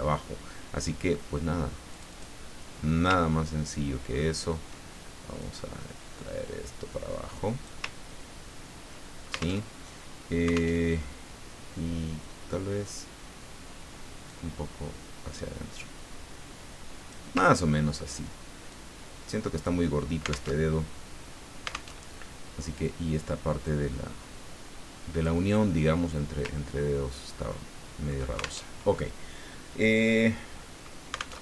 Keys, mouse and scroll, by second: 1.9 click, 3.3-3.7 ctrl+scroll up 1, 4.1-4.6 ctrl+scroll up 1, 5.4-7.8 drag, 8.0-8.6 ctrl+scroll down 1, 9.6 alt+Tab, 10.7 alt+Tab, 14.3-17.4 drag, 17.6-17.9 ctrl+scroll up 2, 18.7-19.8 drag, 20.5 alt+Tab, 21.9 alt+Tab, 23.6-25.4 drag, 26.6-27.3 ctrl+scroll down 2, 27.5 ctrl+middle click, 28.6 ctrl+alt+Tab, 31.3 alt+Tab.